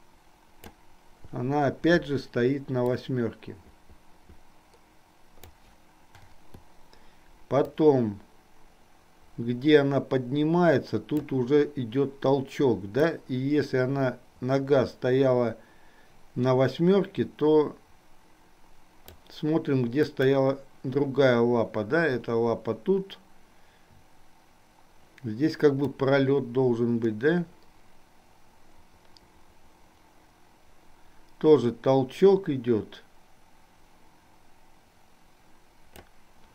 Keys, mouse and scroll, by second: 3.0-6.0 drag, 8.1-11.6 drag, 13.2-19.5 drag, 20.4 click, 26.1-36.2 drag.